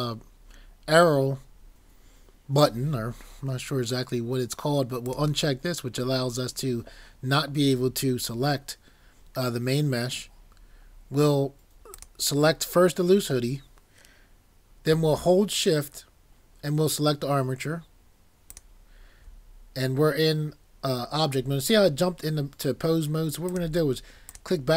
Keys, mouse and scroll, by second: 23.5 click.